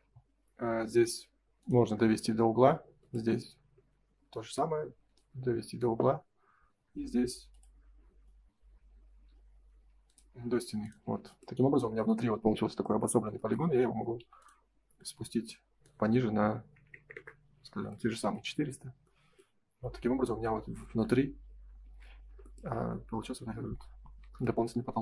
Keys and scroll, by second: 6.0 Escape, 10.5 space, 17.1 Return, 18.5 space, 18.7 Escape, 21.7 ctrl+s, 24.1 shift+h.